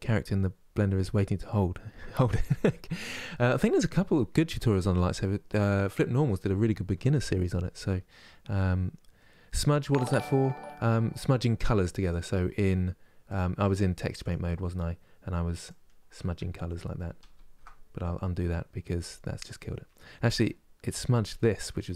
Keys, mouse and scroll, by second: 17.0 ctrl+z.